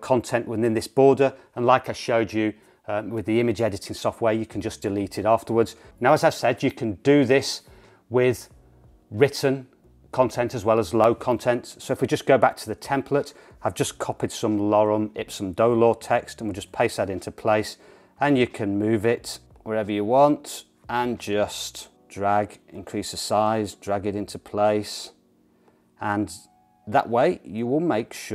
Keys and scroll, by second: 16.6 super+v.